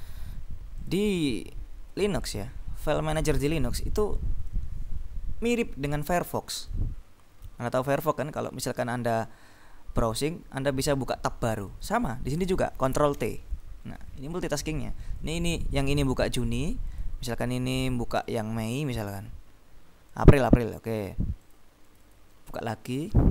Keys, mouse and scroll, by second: 1.0 click, 11.8 click, 13.2 ctrl+t, 15.2-16.0 scroll up 2, 16.3-17.0 scroll up 2, 17.8-18.4 scroll up 2, 18.4 click, 20.1 click, 21.5-22.8 drag.